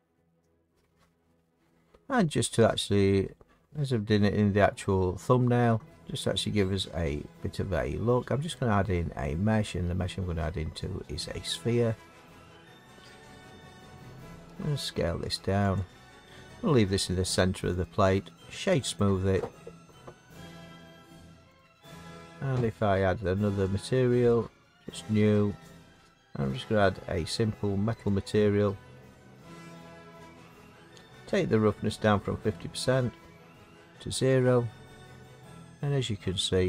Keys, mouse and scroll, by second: 1.1 middle click, 8.5 click, 12.2 click, 14.6 s, 15.7 click, 17.8 click, 18.3 right click, 18.9 click, 21.5 click, 23.7 click, 24.5 click, 29.7 click, 30.1 middle click, 30.1 middle click, 30.5 middle click, 33.5 click, 34.4 middle click.